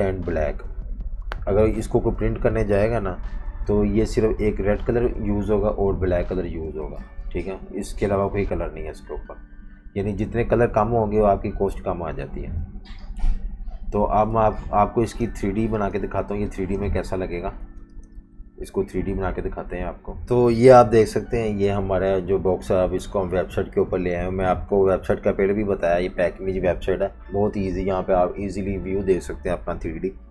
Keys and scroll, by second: 12.6 F19, 13.5 super+-, 14.5-16.4 typing, 17.6 typing.